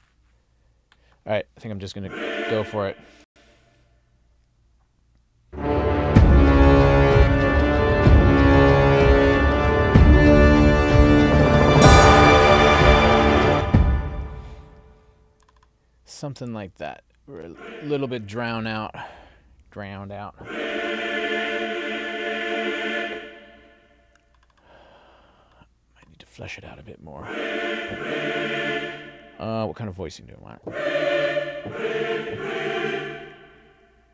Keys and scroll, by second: 3.3 space, 13.5 space.